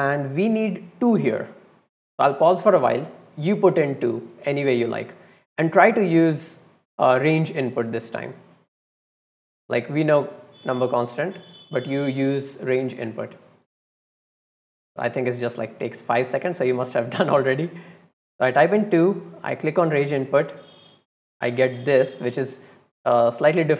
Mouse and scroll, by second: 0.2-0.5 drag, 5.6 click, 7.7 click, 9.9 click, 10.6 click, 16.6 click, 19.7 click, 20.7-21.2 drag.